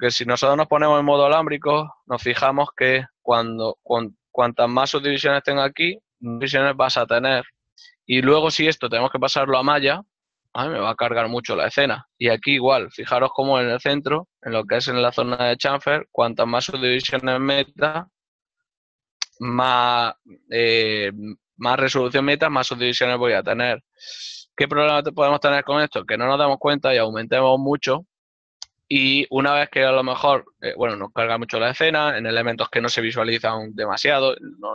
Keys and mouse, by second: 1.1 z, 3.4 shift+middle click, 7.2 ctrl+middle click, 15.6 click, 20.4 click, 24.8 x, 30.0 ctrl+middle click.